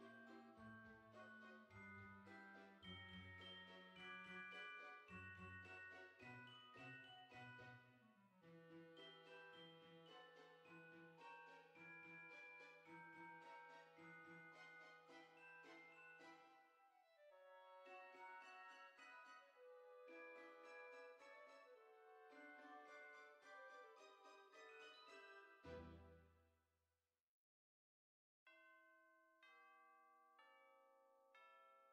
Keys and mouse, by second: 4.1 click, 4.4 Tab, 5.7 click, 6.7 click, 8.0 click, 10.5 click, 12.1 middle click, 12.9 Tab, 14.5 click, 18.7 click, 22.0 click, 22.5 Tab, 23.7 middle click, 26.0 F6, 26.7 click, 28.2 KP_1, 29.4 shift+middle click, 30.6 shift+click.